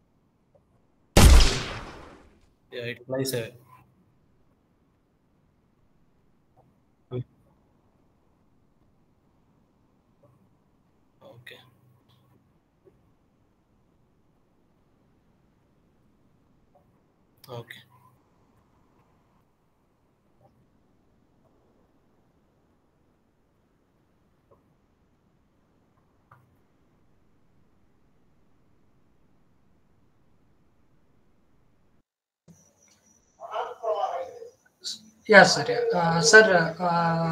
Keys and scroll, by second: 3.8 Escape, 9.1 2, 9.4 0, 10.3 Return.